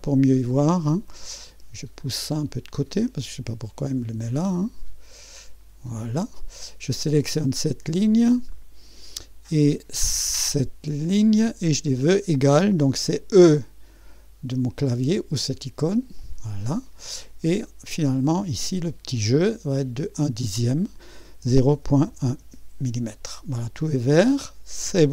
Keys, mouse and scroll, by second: 0.6-1.1 scroll up 1, 1.1-2.4 right drag, 2.4-4.0 drag, 4.2-6.0 drag, 6.4 click, 7.3 click, 8.5-9.3 scroll up 1, 11.0 click, 11.6-12.0 drag, 15.8 e, 18.2-21.4 drag, 21.2-23.2 typing, 24.2-25.1 drag.